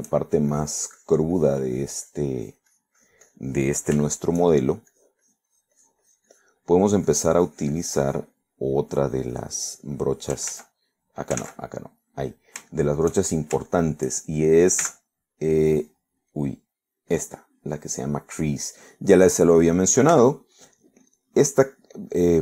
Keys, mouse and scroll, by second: 0.1 middle click, 0.8 shift+middle click, 1.6-4.6 shift+drag, 5.1 shift+middle click, 6.2-7.7 shift+drag, 7.8 shift+middle click, 8.8 click, 9.5 middle click, 10.1 click, 11.6 ctrl+z, 12.5 ctrl+z, 13.3 middle click, 14.3 shift+middle click, 15.3 shift+middle click, 15.9 shift+c, 17.3 click, 18.2 click, 21.2 f, 21.6 click, 22.1-22.4 drag.